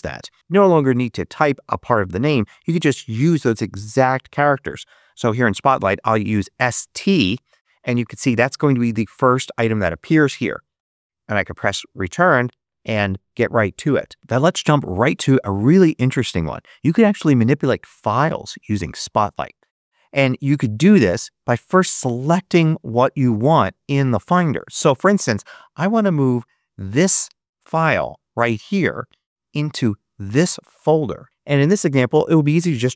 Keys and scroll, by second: 5.6-6.5 typing, 10.6 Return.